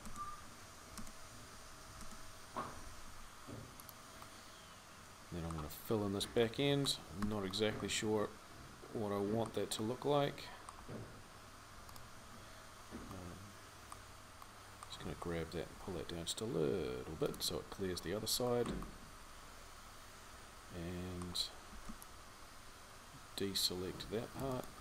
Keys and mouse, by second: 2.9 r, 7.1 Tab, 15.5 g, 21.5 c.